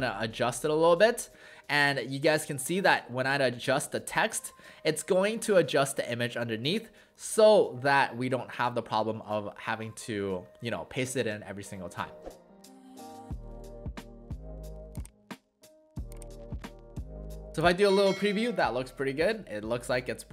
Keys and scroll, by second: 12.1-12.9 typing.